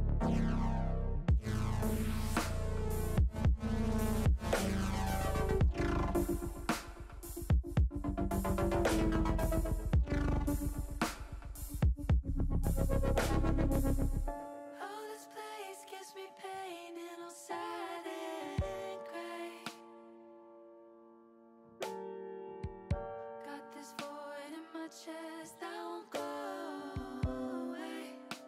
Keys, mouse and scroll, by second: 4.6 middle click, 6.0 middle click, 15.7 middle click, 17.3 h, 18.4 middle click, 19.5 middle click, 21.2 middle click, 22.1 middle click, 24.0 click, 24.8 click, 26.0 middle click, 27.0 click, 27.8 middle click.